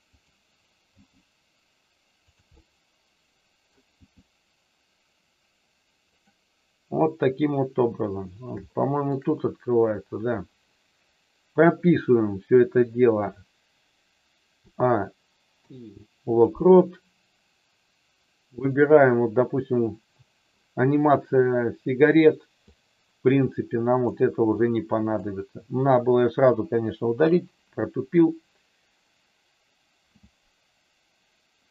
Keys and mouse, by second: 0.8 g, 2.2 click, 2.5-3.6 middle drag, 8.6 shift+middle click, 14.6 a, 15.5 i, 22.6-24.2 drag, 24.5 click, 27.0 Delete.